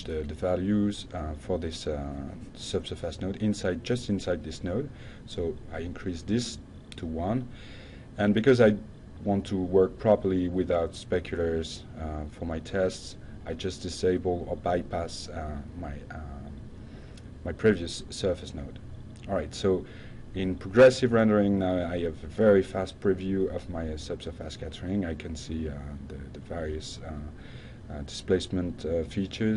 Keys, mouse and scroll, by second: 1.2 click, 2.5 click, 2.8 click, 4.8 click, 5.2-5.7 drag, 7.7 u, 8.2 click, 9.0 Tab, 10.7 drag, 12.8-13.4 drag, 13.6 F5, 16.5 click, 17.4 click, 17.9 click, 27.6 click.